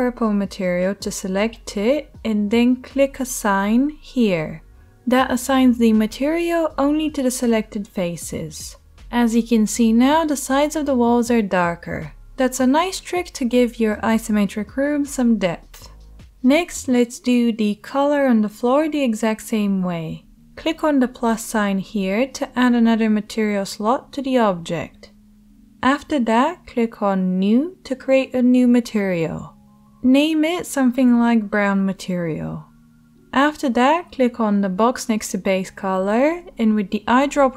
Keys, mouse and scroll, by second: 0.8 click, 0.9-4.5 middle drag, 4.5-9.6 drag, 8.0 Tab, 9.6-23.1 middle drag, 23.1-28.2 drag, 28.2 middle click, 28.3-36.2 drag, 36.2-37.5 middle drag.